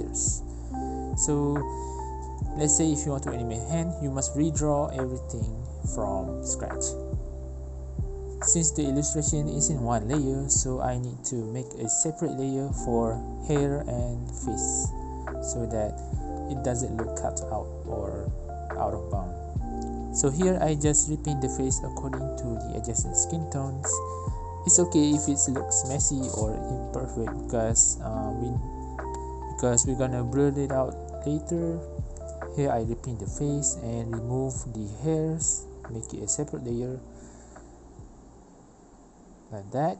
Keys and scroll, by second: 0.3-1.4 typing, 0.6 ctrl+z, 1.4 Return, 4.1 ctrl+alt+b, 4.4 ctrl+v, 4.9 ctrl+j, 5.0 v, 5.4 ctrl+t, 6.1 ctrl+shift+z, 7.5 ctrl+alt+v, 7.8 ctrl+z, 8.0 typing, 17.5 ctrl+j, 19.2-20.8 typing, 20.1 Return, 22.2 Return, 22.2 5, 22.2 i, 22.4 b, 23.7-28.6 typing, 29.8 ctrl+z, 30.0 ctrl+z, 31.8-32.7 typing, 34.2-38.3 typing, 39.7 i, 39.8 b.